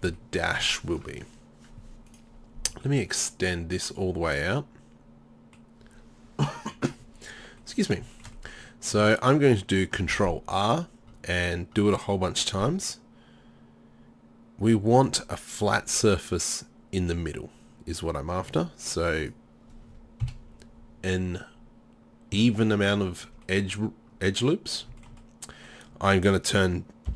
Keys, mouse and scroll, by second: 2.4-4.0 middle drag, 4.9 middle click, 5.3-7.7 middle drag, 8.2 middle click, 8.4 middle click, 10.1 ctrl+r, 15.1 middle click, 20.3 KP_7.